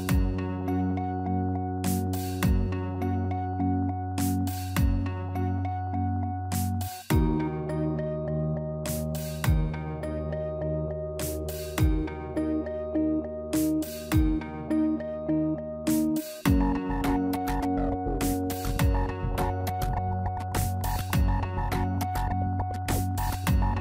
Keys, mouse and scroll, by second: 1.4 alt+click, 2.2 click, 2.7 shift+middle click, 3.3 click, 4.1 click, 6.2 alt+click, 7.2 click, 8.4 shift+middle click, 8.7 middle click, 9.1 Tab, 10.5 click, 11.0 shift+middle click, 12.3 middle click, 16.3-16.8 scroll down 2, 16.9 middle click, 18.2 click, 18.4 Tab, 19.2 shift+middle click, 20.9 click, 21.6 click, 23.1 click, 23.3 shift+click, 23.4 middle click.